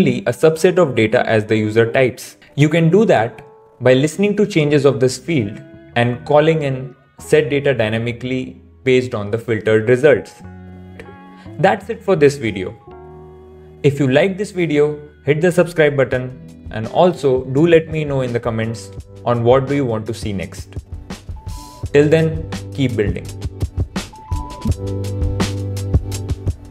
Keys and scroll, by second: 10.3 super+s.